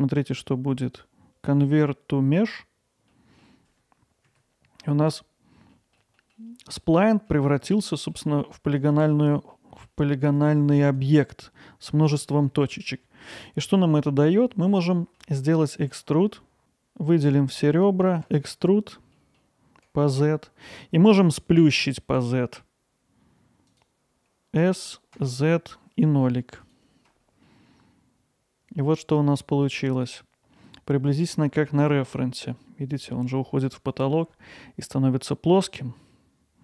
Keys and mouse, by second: 0.2-2.6 right drag, 3.1 alt+middle click, 4.3 Tab, 4.8 alt+middle drag, 5.7 alt+middle click, 6.2 middle click, 7.2 middle click, 7.7 middle click, 8.8 click, 9.5 alt+middle click, 11.1 click, 12.3 middle click, 13.9-15.2 middle drag, 19.1 middle click, 23.7 click, 25.1 z, 26.6 click, 27.5-30.6 alt+middle drag.